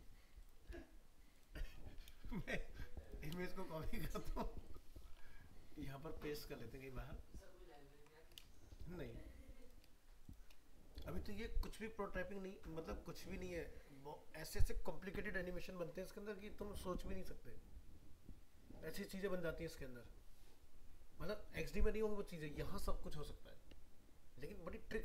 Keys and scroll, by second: 2.4 ctrl+c.